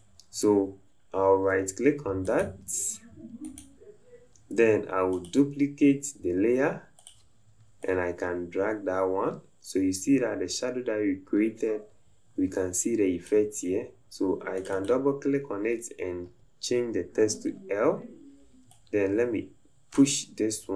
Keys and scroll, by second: 20.6 Left.